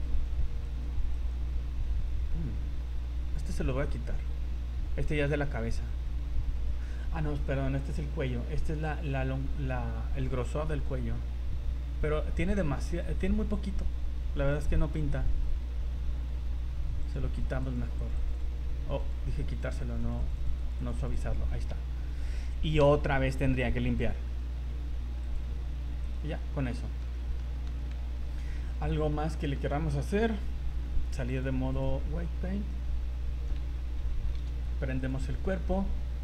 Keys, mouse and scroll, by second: 0.1 right click, 0.6 right click, 1.1 right click, 2.5 scroll up 2, 4.5 scroll down 1, 6.8 scroll down 3, 7.6 scroll up 2, 16.1-17.0 scroll up 14, 17.0-18.3 click, 18.1 click, 18.2 click, 19.0 click, 20.0 click, 20.2 click, 20.5 click, 20.6 click, 20.8 click, 21.0 click, 21.1 click, 21.4 scroll down 3, 22.8 v, 24.0-24.4 scroll down 9, 25.2 click, 26.0 right click, 26.2-26.6 scroll down 5, 26.8 shift+middle click, 27.1 middle click, 27.5-28.2 scroll up 7, 27.7 v, 28.2 z, 28.5 middle click, 31.3 click, 32.2 scroll down 2, 34.3 alt+h, 35.0 right click, 35.6 middle click, 36.0 middle click.